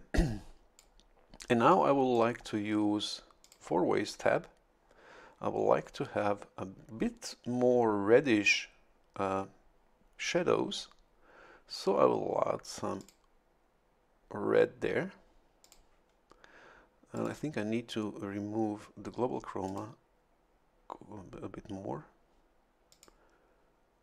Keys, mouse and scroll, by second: 0.2 click, 1.7 click, 2.4-3.0 scroll up 1, 3.4 click, 13.0 click, 15.6 click, 17.1 click, 19.7 click, 22.9 click.